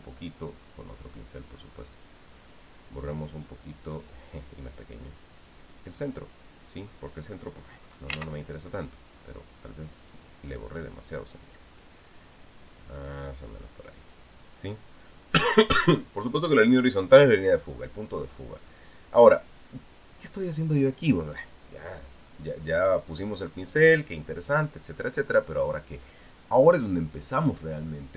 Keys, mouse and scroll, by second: 1.5 click, 2.7 click, 4.8 click, 6.8 click, 10.8 click, 12.7-15.4 drag, 23.9 click, 25.3 click.